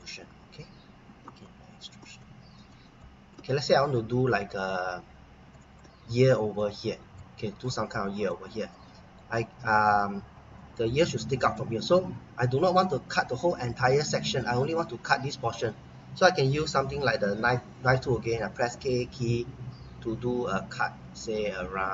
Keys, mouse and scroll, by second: 0.3 scroll down 1, 1.4 middle click, 2.2 middle click, 2.9 middle click, 3.7-5.4 scroll up 1, 5.5 middle click, 16.5-17.3 scroll up 1, 17.3 k, 19.1 click.